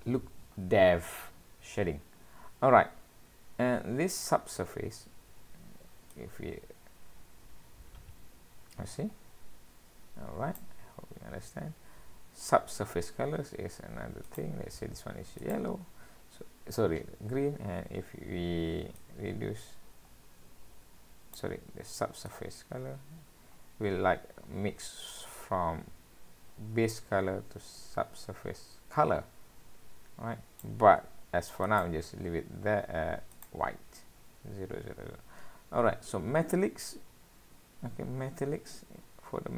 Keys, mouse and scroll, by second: 0.0 click, 0.0 scroll down 7, 1.5-1.9 scroll up 2, 2.2-2.6 scroll up 1, 4.7-5.2 scroll up 1, 5.2 scroll down 1, 6.1 click, 11.4-11.9 scroll down 2, 12.8-13.2 scroll up 1, 14.3 click, 19.0 click, 22.3 click, 31.7 click, 35.2-35.9 scroll down 2, 36.2-36.8 scroll up 3, 36.8-37.2 scroll down 1, 38.2 scroll down 1.